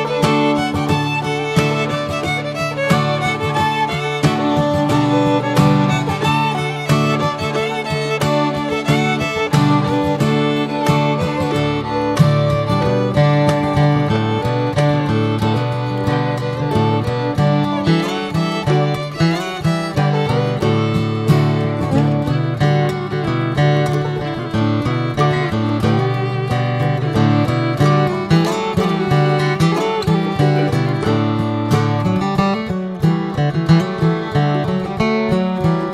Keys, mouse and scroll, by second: 0.1 middle click, 0.3 scroll up 2, 1.4 ctrl+r, 2.1 middle click, 2.4 s, 3.5 Tab, 3.6 drag, 3.9 scroll down 3, 4.1-4.8 middle drag, 4.8 click, 5.2 right drag, 5.5 drag, 5.7 click, 6.2 /, 6.7-7.0 scroll down 3, 7.1 alt+middle click, 8.5 s, 10.1 click, 11.4 `, 12.3-12.9 shift+middle drag, 12.9 s, 14.0 click, 14.8-15.5 shift+middle drag, 15.5 r, 17.2 click, 18.1 s, 19.6 click, 21.2 ctrl+a, 21.9 scroll up 1, 22.4 click, 22.7-25.9 right drag, 26.2 click, 27.3 drag, 27.4 scroll down 2, 27.7 alt+middle click, 28.6 drag, 29.0 scroll up 2, 29.2 s, 30.8 alt+middle click, 32.0 click, 34.5 r, 35.4 click, 35.7 scroll down 2.